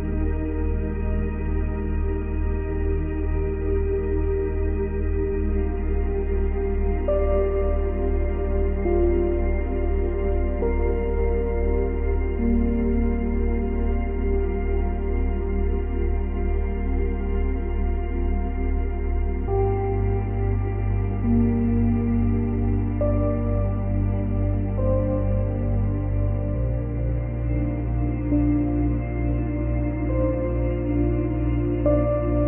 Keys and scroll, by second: 3.2 ctrl+z, 10.9 space, 17.7 space, 30.3 ctrl+c, 30.5 ctrl+v.